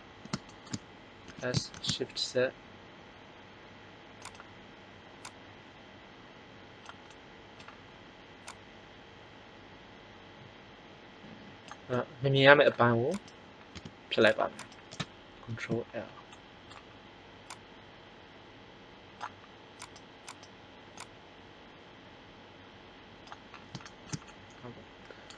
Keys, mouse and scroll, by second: 1.2 s, 8.7-10.3 drag, 13.1 right click, 13.6 x, 15.5 ctrl+l, 17.4 click, 19.8-21.3 drag, 20.9 right click, 23.9 middle click.